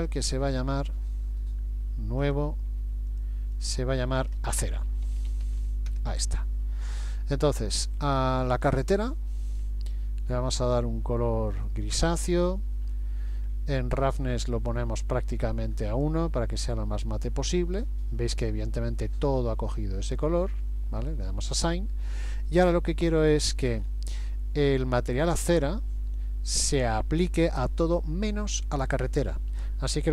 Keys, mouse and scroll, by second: 2.2 click, 3.1 click, 8.7 click, 9.6-10.6 scroll down 2, 10.6 click, 13.5 scroll down 1, 14.7 click, 21.0 click, 22.3 middle click, 23.8-24.3 scroll up 3.